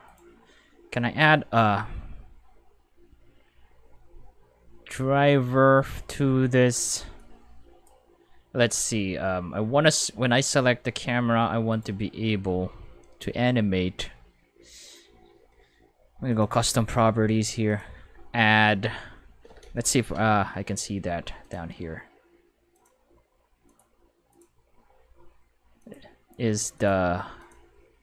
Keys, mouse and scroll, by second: 0.1 right click, 7.1 click, 11.7-14.6 right drag, 16.3 click, 17.6 click, 20.1 5, 21.4 click, 22.7 click, 23.6 click, 24.3 click, 25.8 click, 26.8 click, 27.4 click.